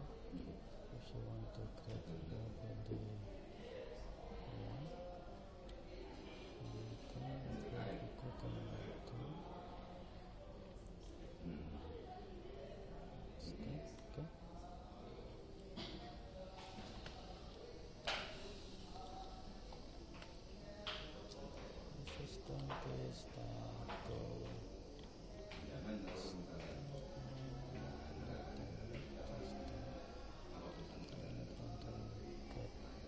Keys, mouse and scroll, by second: 7.8 click, 11.1-12.8 middle drag, 15.6-17.5 middle drag, 17.5 click, 19.8 middle click, 20.8-26.8 middle drag, 26.8 click, 31.6 middle click, 32.2 middle click, 32.4-33.0 middle drag.